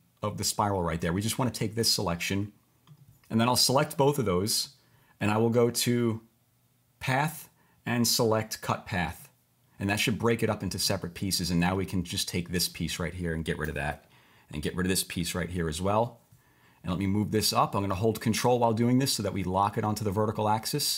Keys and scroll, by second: 13.7 Delete, 15.2 Delete.